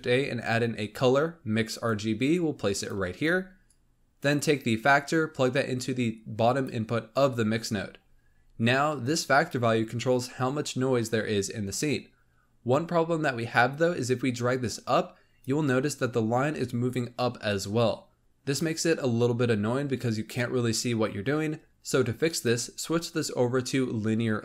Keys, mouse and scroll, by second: 3.2-3.6 scroll up 1, 3.6 click, 4.7-7.8 drag, 7.9-10.7 scroll up 5, 13.7-16.8 drag, 18.2-20.2 scroll down 3, 22.2-24.4 drag.